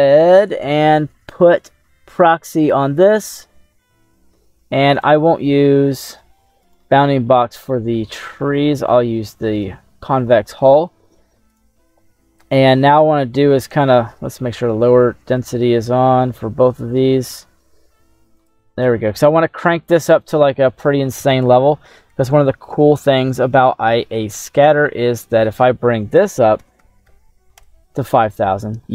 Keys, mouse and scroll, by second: 0.0 middle click, 2.3 click, 5.0 click, 5.8 middle click, 6.7 right click, 7.0 middle click, 7.7 middle click, 9.7 click, 10.4 middle click, 11.5 right click, 12.0 middle click, 14.1 middle click, 16.3-17.4 middle drag, 18.5 click, 25.1-27.8 drag, 26.9 KP_0, 27.1 KP_0.